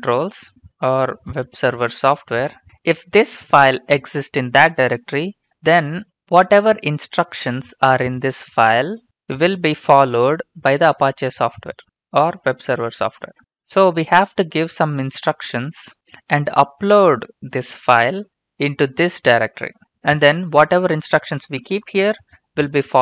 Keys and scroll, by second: 0.3 Return, 0.5-3.1 typing.